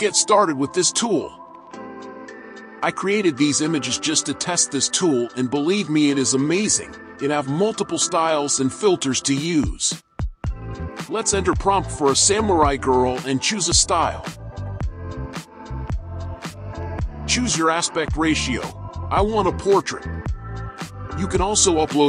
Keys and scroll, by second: 2.3 alt+a, 10.5 alt+a.